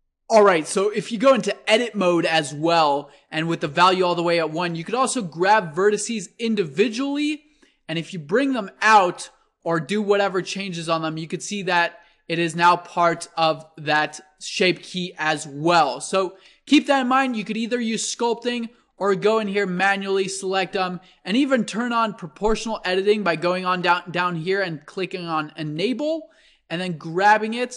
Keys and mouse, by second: 2.5-4.8 middle drag, 4.8-6.4 right drag, 5.7 c, 6.9-8.7 right drag, 7.3 g, 10.7 Tab, 11.1-12.1 middle drag, 12.1-14.0 drag, 15.5 middle click, 15.8 Tab, 17.1 ctrl+z, 17.2 ctrl+z, 18.7 a, 19.1 c, 20.4-22.1 drag, 22.8-24.6 drag.